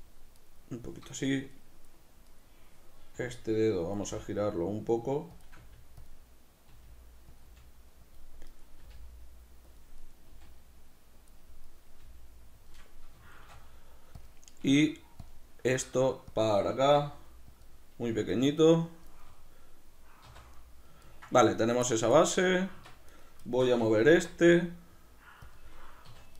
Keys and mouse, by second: 0.3-3.1 right drag, 3.1 r, 4.0 click, 4.0 g, 5.4 click, 5.6 r, 6.0 click, 6.7 r, 7.4 click, 7.5 g, 8.2 click, 8.5 right click, 8.8 g, 9.8 click, 10.0 right click, 10.3 g, 11.3 click, 11.7 right click, 12.0 g, 12.7 click, 13.4 shift+d, 14.3 click, 14.6 s, 15.3 click, 15.7 r, 16.4 click, 16.9 r, 17.7 click, 18.1 g, 19.1 click, 19.3-21.6 middle drag, 20.3 z, 21.6 right click, 22.1-23.1 ctrl+middle drag, 22.7 Tab, 23.1 right click, 23.5-25.5 shift+middle drag, 24.0 g, 25.5 click, 26.1 2.